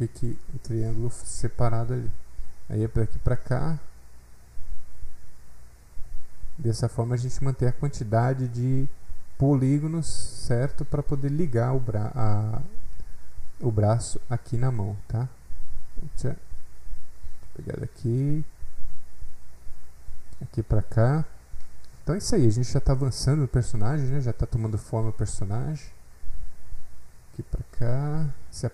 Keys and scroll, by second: 16.1 ctrl+alt+z.